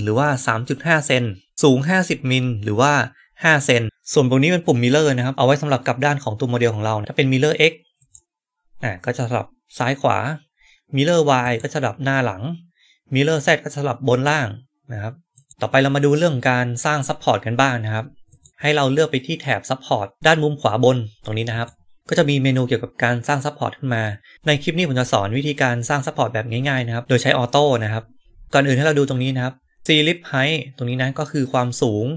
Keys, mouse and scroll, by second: 8.0 click, 11.3 click, 14.0 click, 15.2 click, 18.2 click, 21.4 right click.